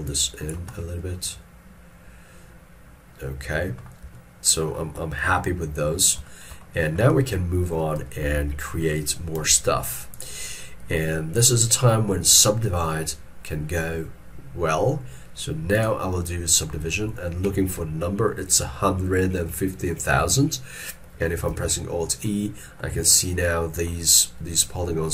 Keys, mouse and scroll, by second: 6.3 shift+middle click, 7.4 ctrl+middle click, 8.1 shift+middle click, 21.6 alt+e, 22.3 middle click, 23.2 ctrl+middle click.